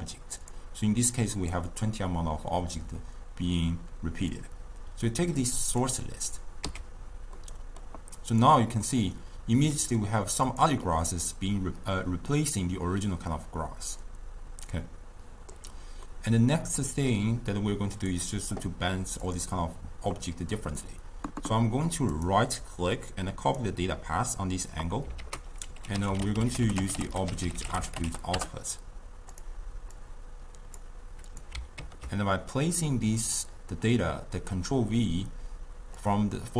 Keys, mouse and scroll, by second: 4.3 drag, 6.3 click, 7.0 x, 7.4 middle click, 8.2 click, 8.9-10.5 middle drag, 10.5 click, 11.0-14.0 middle drag, 16.1-18.0 middle drag, 18.0 click, 19.3 click, 20.6-22.2 middle drag, 22.2-25.2 right drag, 25.2 ctrl+a, 27.1 t, 30.0 drag, 31.3-34.5 drag.